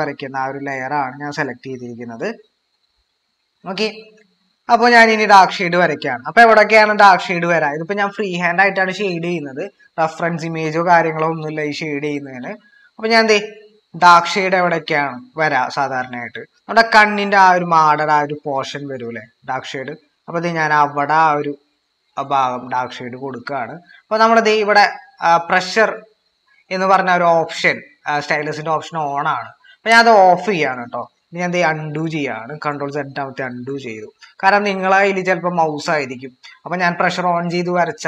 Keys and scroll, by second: 12.8 ctrl+=, 31.7 ctrl+z, 33.4 ctrl+z, 34.3 ctrl+z, 35.1 ctrl+z.